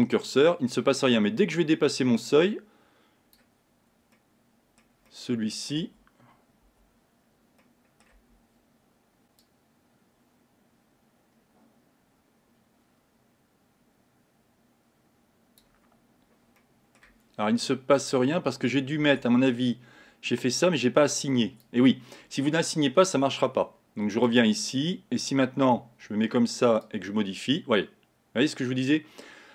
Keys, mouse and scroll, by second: 4.7-6.0 middle drag, 6.0 Tab, 6.8 Tab, 7.7 middle click, 8.3 Tab, 9.5-12.5 drag, 17.0-18.1 middle drag, 18.1 click, 19.2 Tab, 21.4-24.5 drag, 25.8 Tab, 27.0-29.5 drag.